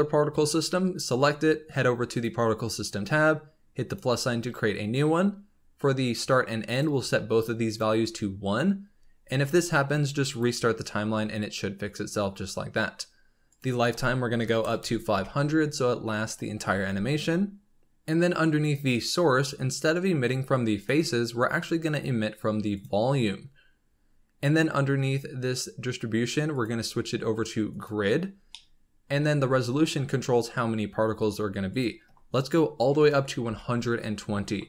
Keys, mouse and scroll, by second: 2.1 click, 3.8-7.7 drag, 9.2-10.2 scroll down 2, 10.2 click, 11.1-13.4 scroll up 3, 13.4-14.7 drag, 14.7 KP_0, 18.6-19.2 drag, 19.2-20.7 scroll down 3, 20.7-23.8 drag, 26.4-28.3 drag, 27.8 middle click, 28.3 scroll down 2, 28.4-29.2 middle drag, 29.2-30.2 scroll up 2, 31.6-34.6 drag, 34.6 scroll down 3.